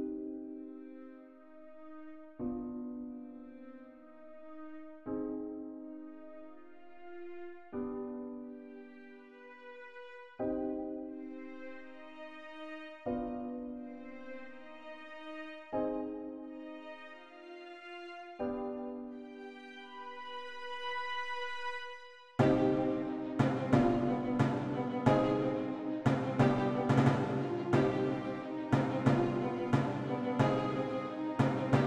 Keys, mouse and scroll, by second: 3.6 click, 29.5 alt+click.